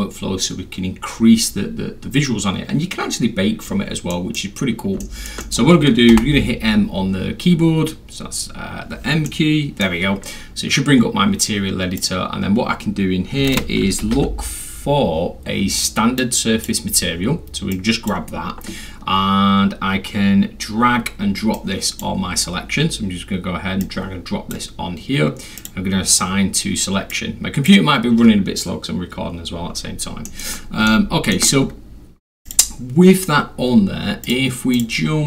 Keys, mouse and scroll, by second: 4.1 middle drag, 5.0 alt+middle drag, 5.4 alt+middle drag, 6.1 m, 8.1 scroll down 2, 8.3-9.1 scroll, 9.3-9.8 middle drag, 10.8 scroll down 2, 10.9 scroll, 11.0 scroll up 2, 11.1-12.0 scroll, 12.0 click, 14.0 s, 14.6 u, 16.2 click, 17.7-18.1 drag, 21.6 click, 23.8 click, 25.6 click, 27.1-27.7 drag, 30.3 middle click, 30.9 alt+middle click, 31.7 scroll up 1, 31.7 scroll, 32.5 click, 34.2 click, 34.8 click.